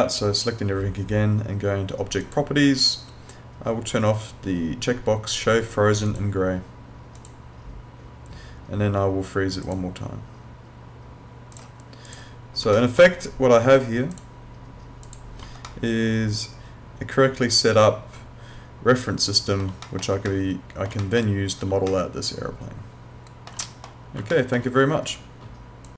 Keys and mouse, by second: 0.4 right click, 2.2 click, 6.1 click, 12.8 alt+middle click, 14.2 click, 15.6 alt+middle click, 19.9 middle click, 20.3 alt+middle click, 21.9 alt+middle click, 24.3 alt+middle click, 25.9 click.